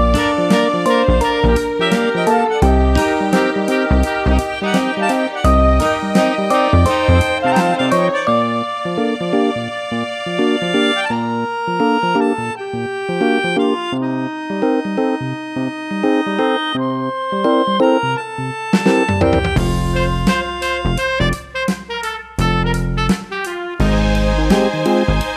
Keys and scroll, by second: 11.1 BackSpace, 11.9 super+d, 18.7 Right, 18.9 Right, 19.1 Right, 20.1 super+d, 20.5 super+d, 20.9 super+d.